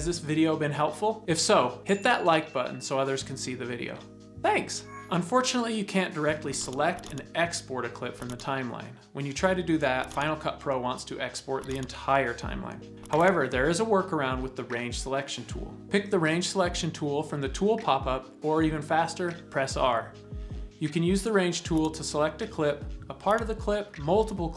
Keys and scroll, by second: 19.3 r.